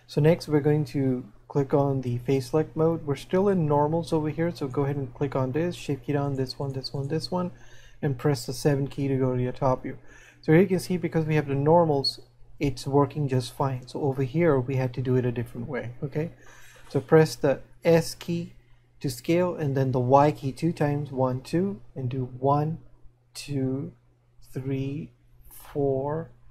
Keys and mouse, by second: 4.6 right click.